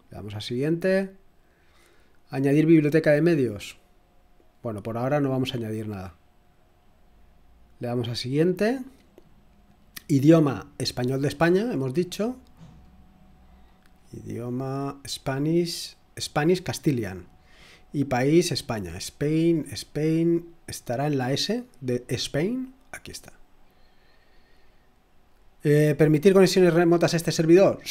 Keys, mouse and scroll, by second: 0.5 click, 6.7 click, 7.9 click, 9.7 click, 10.7-11.6 scroll down 2, 12.4-15.6 scroll down 4, 15.6-16.4 scroll down 1, 16.4 click, 17.6 click, 18.5-19.3 scroll down 2, 19.3-21.6 scroll up 2, 21.6-23.1 scroll down 2, 23.1 click, 23.9 click.